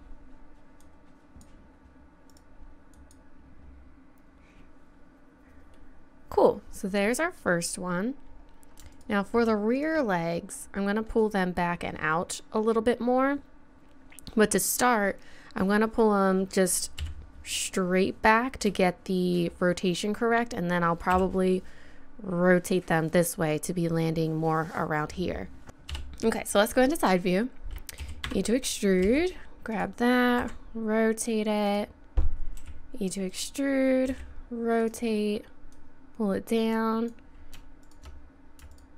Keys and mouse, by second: 3.0-4.2 right drag, 4.8 middle click, 5.7 middle click, 8.9-10.3 right drag, 17.0 KP_3, 21.1 KP_7, 25.9 KP_3, 28.0 e, 29.0 g, 30.4 r, 32.6 e, 34.1 r, 35.7 click, 37.3 click.